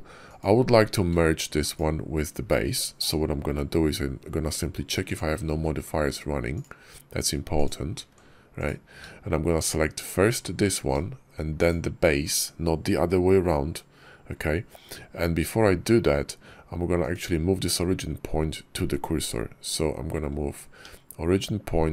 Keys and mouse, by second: 0.1 click, 4.9 click, 5.5 ctrl+`, 7.4 click, 7.9 ctrl+`, 11.4 shift+click, 16.9 click, 20.7 shift+s.